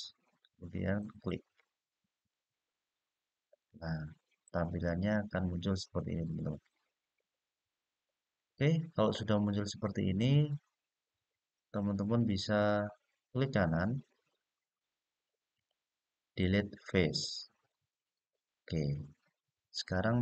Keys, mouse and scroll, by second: 0.7 click, 2.4-4.2 middle drag, 4.5-6.0 scroll down 2, 6.2-11.9 middle drag, 13.6-19.3 right drag, 19.3-20.1 scroll up 2, 20.1-20.2 scroll down 1.